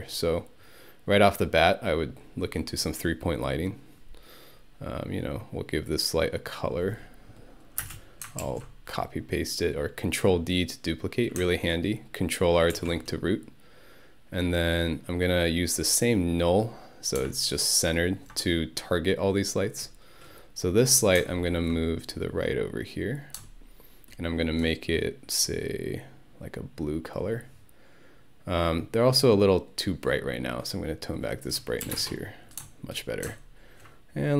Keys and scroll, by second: 7.9 space, 8.4 ctrl+d, 12.8 ctrl+r, 31.9 1, 32.0 Return.